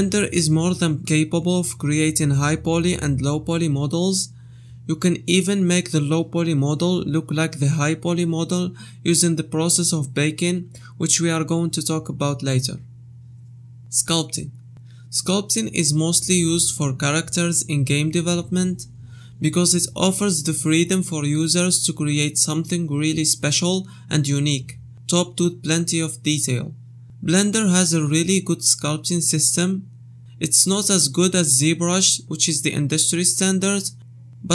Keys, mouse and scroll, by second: 0.1 click, 6.1 click, 8.0 click.